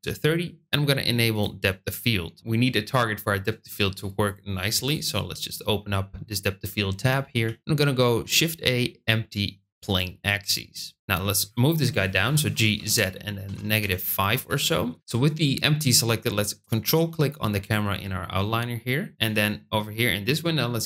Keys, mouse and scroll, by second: 1.2 click, 4.8 click, 7.3 shift+a, 10.9 g, 12.7 z, 13.7 KP_Subtract, 13.7 KP_5, 14.4 KP_Enter.